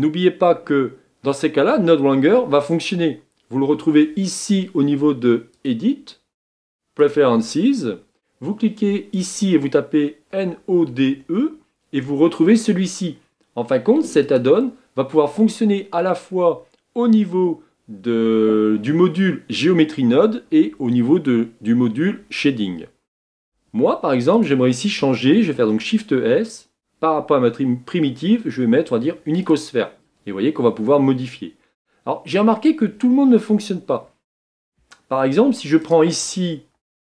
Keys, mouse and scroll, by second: 7.5-26.1 drag, 31.4-32.0 scroll up 5, 32.2-33.8 scroll down 2, 33.8-34.2 scroll down 1.